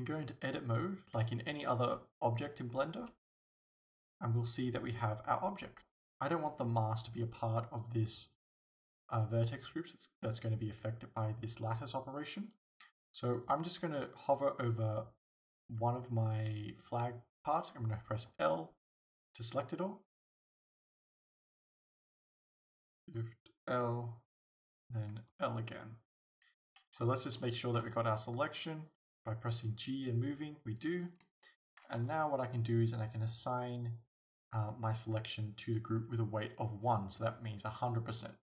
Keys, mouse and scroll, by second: 3.0 Tab, 5.8 right click, 18.4 l, 20.5 l, 23.1 shift+right click, 25.3 l, 26.2-27.5 scroll down 1, 27.5-30.2 shift+middle drag, 27.9 g, 30.9 right click, 31.5-35.0 shift+middle drag, 35.0 click.